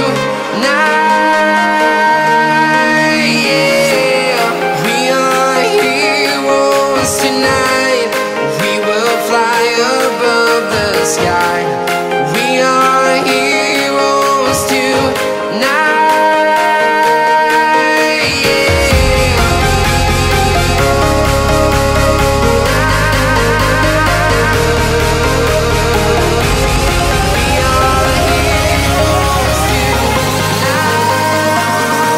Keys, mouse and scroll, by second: 1.7 right click, 1.9 right click, 3.0 right click, 3.6 right click, 4.5 right click, 4.9 right click, 5.0 right click, 7.6 right click, 15.4 right click, 16.2 right click, 16.5 right click, 16.7 right click, 19.0 right click, 26.1 right click, 26.5 right click, 27.4 right click, 28.9 right click.